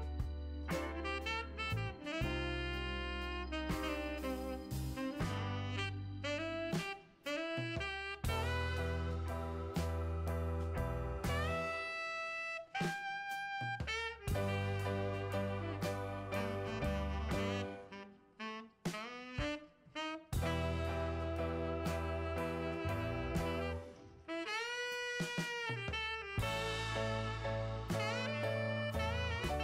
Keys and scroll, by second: 25.7 m.